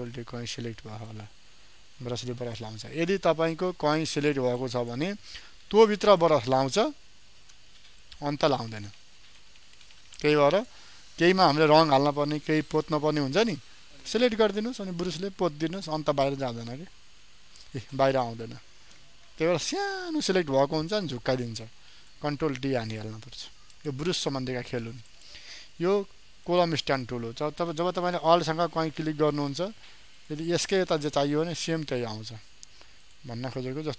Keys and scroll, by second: 0.4 ctrl+d, 19.6 ctrl+d.